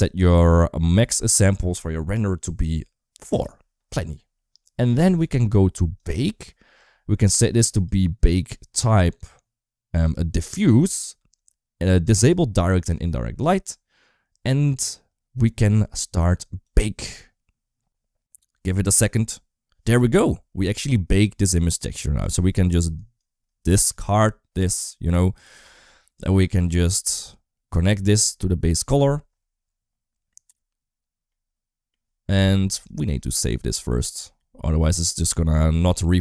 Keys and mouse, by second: 0.7-3.2 drag, 5.8 click, 7.7-10.7 drag, 12.0 click, 12.6 click, 26.2 click, 26.5 middle click, 27.8 click, 31.3 middle click, 32.8-34.5 drag, 35.5 middle click.